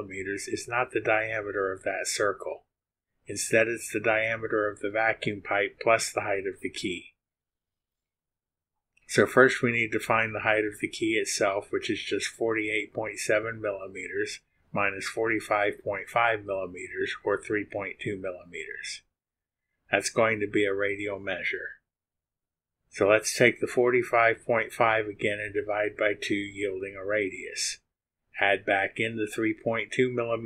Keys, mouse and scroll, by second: 13.2 click, 13.9 click, 14.4 click, 14.7-17.7 typing, 18.0 Return, 23.2 click, 23.9 click, 24.5 click, 25.2 click, 26.0 click, 27.1 click, 27.8 click, 28.2 click, 29.4 click, 30.0 click.